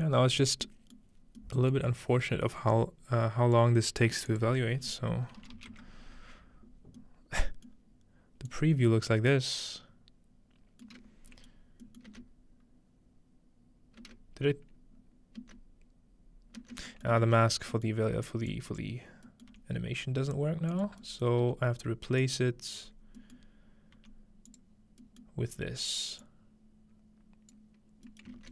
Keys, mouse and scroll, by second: 0.6 middle click, 2.5 scroll down 1, 2.7 click, 4.3 click, 7.7 middle click, 8.5-10.5 drag, 11.0-11.3 middle drag, 11.2-11.7 scroll down 1, 11.5 middle click, 11.7 scroll up 1, 12.1-13.5 middle drag, 12.1 space, 14.0 space, 14.5-16.1 scroll up 1, 15.4 space, 16.6 space, 17.1-18.8 middle drag, 17.2 ctrl+space, 17.5-18.0 scroll down 1, 18.0-18.8 scroll up 1, 18.5-20.4 drag, 19.5 g, 20.7 click, 20.9-22.2 scroll down 1, 21.4 g, 22.2 drag, 22.7-23.9 scroll up 1, 23.9-24.5 scroll up 1, 24.0 g, 24.5-28.5 drag, 28.4-28.5 ctrl+middle drag.